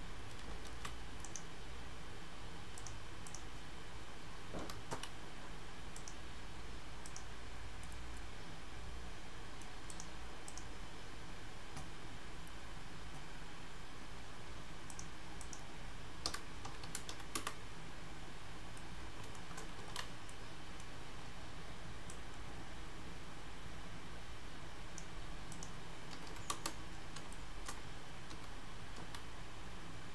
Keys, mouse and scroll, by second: 0.8 ctrl+z, 1.3 right click, 3.3 click, 4.7 g, 6.4-7.1 scroll down 4, 7.1 click, 7.5 scroll up 4, 7.9 middle click, 9.9 click, 10.5 click, 11.1-12.6 scroll down 2, 12.6-13.6 scroll up 2, 14.9 click, 18.8 middle click, 19.6 ctrl+scroll up 1, 19.9 ctrl+z, 20.3 middle click, 22.1 click, 25.5 click, 26.3 KP_1, 27.4 shift+middle click, 28.4 g.